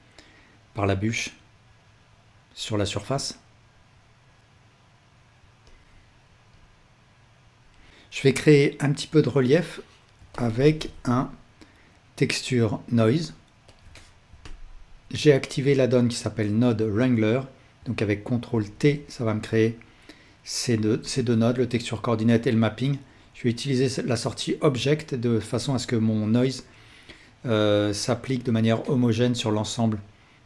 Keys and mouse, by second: 7.9-10.1 drag, 10.2-13.8 ctrl+alt+drag, 11.0 shift+a, 18.6 ctrl+t, 23.0-30.4 drag.